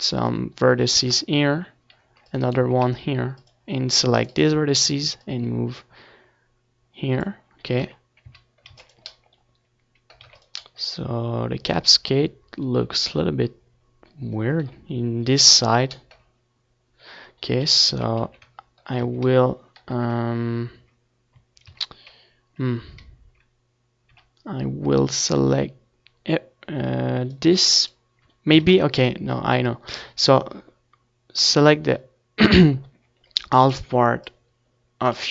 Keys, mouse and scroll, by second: 3.8-5.6 middle drag, 5.6-9.7 typing, 5.8 Tab, 12.3 c, 16.1-18.1 right drag, 16.8 a, 17.0 c, 18.1-20.0 middle drag, 23.8-25.9 right drag, 24.4 x, 25.1 Tab, 25.6 Tab, 25.9 ctrl+z, 26.3 ctrl+z, 26.6-27.9 middle drag, 27.9-29.5 drag, 28.1 x, 29.3 Tab, 30.4-31.9 drag, 31.9-33.1 middle drag, 33.1-35.2 drag, 34.3 Tab, 34.7 z, 35.0 a.